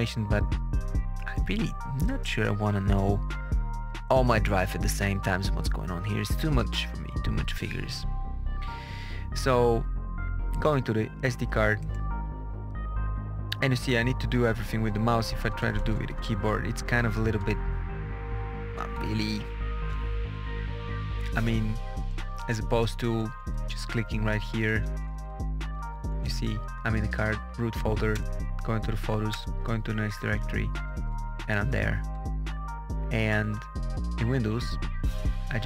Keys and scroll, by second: 15.3 Up, 16.2 Down, 17.2 Right, 17.9 Down, 18.3 Right, 18.7 Left, 19.0 Up, 23.1 BackSpace, 25.0 Down, 25.7 Up, 28.1 Return, 28.7 Down, 29.2 Return, 30.0 Page_Down, 30.8 Page_Up, 31.9 Page_Down, 33.4 alt+Tab.